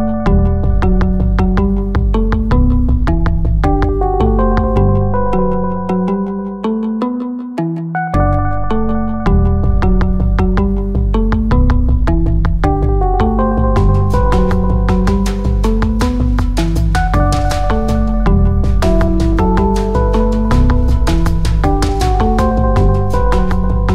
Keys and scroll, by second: 0.6 shift+g, 3.0 x, 7.1 shift+g, 9.1 x, 13.3 shift+g, 16.6 x.